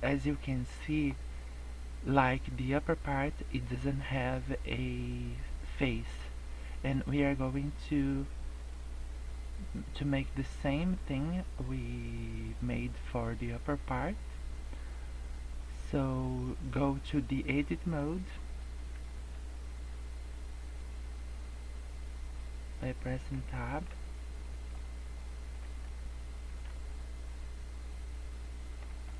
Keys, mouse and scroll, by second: 0.0 scroll down 1, 0.2 scroll up 1, 0.8 middle click, 6.2 middle click, 7.0 scroll down 2, 7.3 scroll up 1, 19.1 Tab, 20.6 scroll up 2, 21.8 scroll down 2, 22.3 middle click, 23.9 Tab, 24.4 middle click, 24.7 Tab, 25.1 middle click, 25.6 Tab, 25.8 middle click, 26.7 Tab, 26.8 middle click, 28.9 Tab.